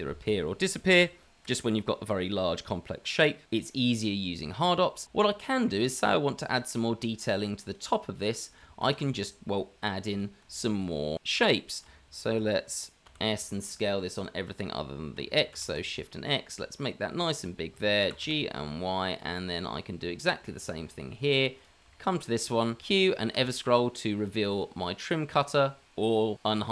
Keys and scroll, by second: 9.1 shift+a, 10.7 shift+a, 11.2 s, 12.3 s, 13.0 s, 15.8 s, 18.0 g, 20.7 g, 22.8 q.